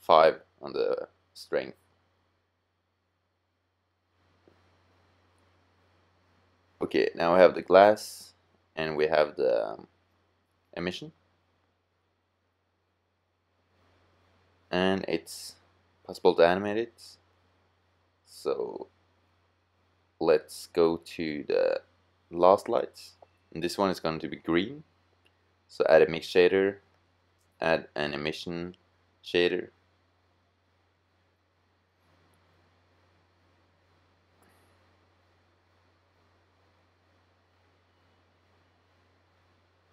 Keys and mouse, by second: 3.5-5.3 drag, 8.0-9.9 drag, 21.9-23.1 drag, 23.1 middle click, 23.6-26.0 drag, 26.8 click, 35.9-37.7 drag.